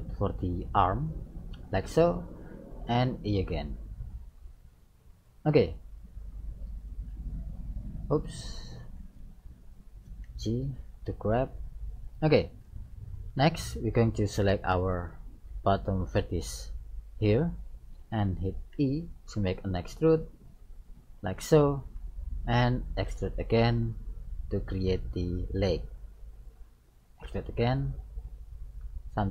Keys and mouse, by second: 3.0 e, 6.8 right click, 7.2 e, 8.8 ctrl+z, 9.7-11.3 right drag, 10.2 g, 12.6-14.3 drag, 16.0 right click, 18.8 e, 21.8-23.9 middle drag, 23.1 e, 27.3 e.